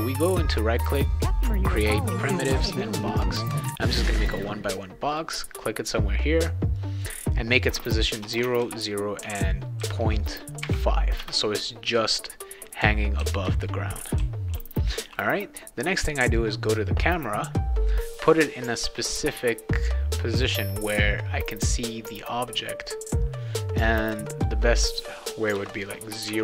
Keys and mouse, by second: 2.7 click, 3.8 click, 5.1 click, 6.8 drag, 8.4 Tab, 9.2 Tab, 12.4-15.2 right drag, 12.8 a, 13.2 w, 14.2 s, 14.5 e, 16.2 click, 19.7 click, 20.5 click, 24.2 drag, 26.3 Tab.